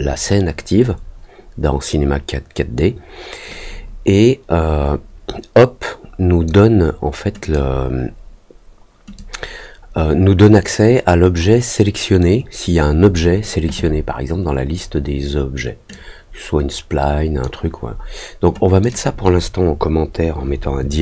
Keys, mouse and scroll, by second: 7.4 click, 9.1-11.3 drag, 15.8-17.4 drag, 18.8 click.